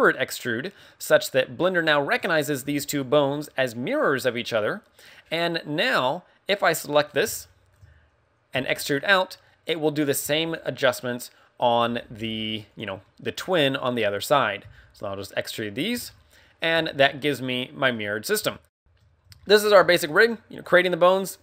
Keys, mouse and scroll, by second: 1.2 e, 7.0-7.3 scroll down 2, 7.3 middle click, 16.0 scroll down 4, 16.2 middle click, 16.7 a, 16.8 middle click, 17.9 middle click, 18.3 KP_1, 18.8 right click, 18.8 shift+middle click, 18.8-19.2 scroll down 2, 18.8 g, 18.8 a, 19.4 shift+middle click, 20.4 right click, 21.1 right click.